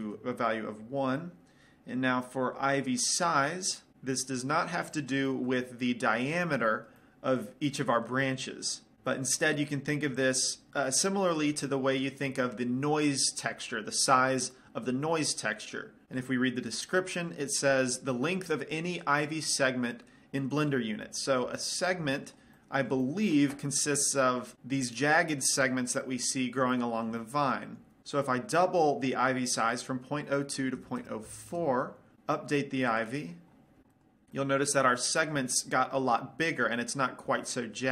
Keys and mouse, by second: 5.1 middle click, 6.0 middle click, 6.2-8.9 middle drag, 9.3-24.5 middle drag, 27.0-28.0 middle drag, 29.8-31.9 drag, 33.2-34.3 drag, 34.6 middle click.